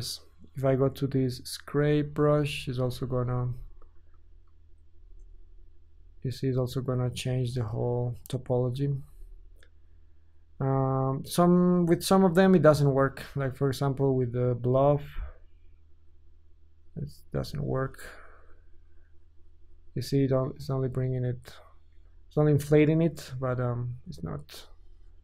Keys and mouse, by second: 4.1 ctrl+Tab, 5.3 Tab, 6.3 ctrl+click, 6.5-9.1 drag, 9.1 Tab, 14.5 ctrl+shift+click, 14.9-21.5 ctrl+shift+drag, 20.9 Tab, 22.0 Tab.